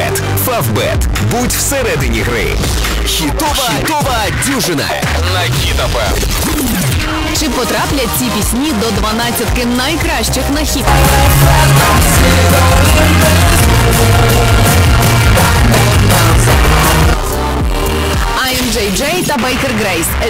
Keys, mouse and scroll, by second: 17.0 Page_Down.